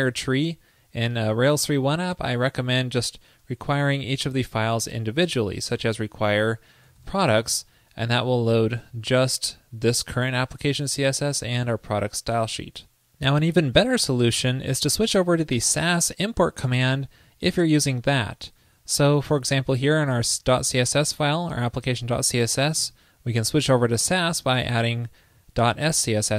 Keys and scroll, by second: 4.4 shift+super+Right.